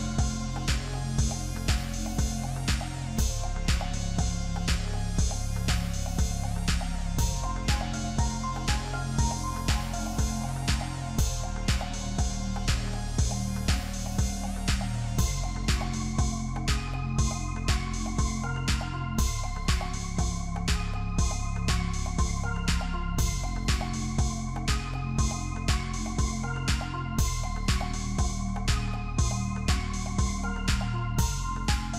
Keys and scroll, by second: 11.0 ctrl+z, 27.8 ctrl+z.